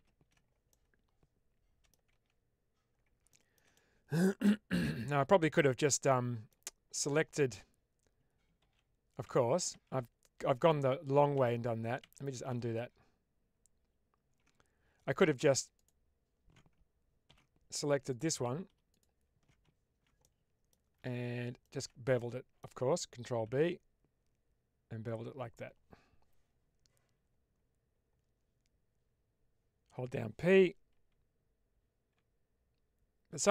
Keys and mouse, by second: 0.6-1.8 middle drag, 2.0 Tab, 3.2 shift+middle click, 3.6-6.4 middle drag, 8.6 ctrl+z, 9.2 ctrl+z, 10.4 ctrl+z, 12.4 ctrl+z, 15.8 alt+click, 17.2 ctrl+x, 18.0 alt+click, 18.8 alt+shift+click, 20.1 middle click, 21.5 alt+shift+click, 22.0 middle click, 23.3 ctrl+b, 32.5 p, 32.7-33.5 p.